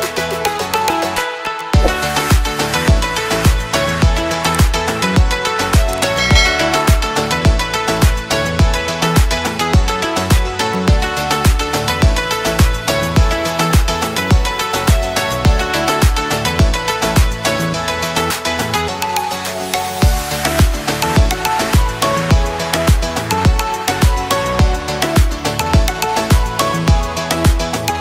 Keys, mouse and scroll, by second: 0.0-2.3 typing, 3.3 click, 10.5 click, 11.6-13.4 typing, 13.8 Return, 15.6 click, 16.8-18.6 typing, 23.8-27.5 drag, 27.5 click.